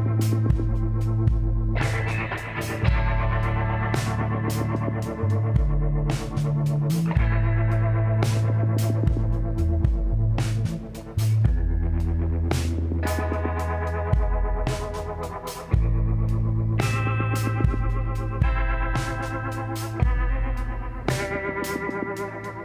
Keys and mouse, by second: 2.5-4.3 drag, 3.5 b, 4.6 z, 5.3 b, 7.2-9.0 drag, 10.1 z, 11.0-12.7 middle drag, 12.7-14.6 drag, 14.6 middle click, 16.3 KP_1, 17.5 middle click, 18.5-21.5 drag, 18.5 e.